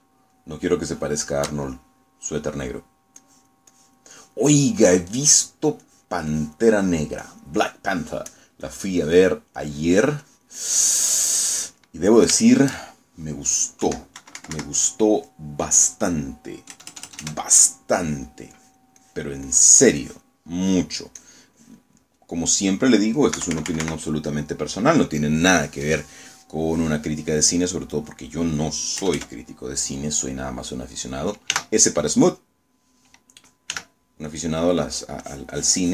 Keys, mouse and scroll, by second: 0.4 shift+middle click, 1.4 shift+middle click, 2.8 shift+middle click, 4.3 click, 6.0 middle click, 6.9 click, 8.3-9.7 drag, 9.8 click, 10.7-12.0 drag, 12.1 click, 12.9 middle click, 13.6 shift+middle click, 14.9 KP_1, 15.3 KP_Subtract, 16.4 click, 16.8-17.9 middle drag, 17.8 KP_Add, 19.0 click, 19.6 click, 20.6 click, 21.1 click, 21.7 click, 22.3 click, 23.1 middle click, 24.4 KP_Subtract, 25.1 middle click, 27.8-29.4 middle drag, 30.1 KP_Add, 32.6 s, 34.8 f, 35.4 click.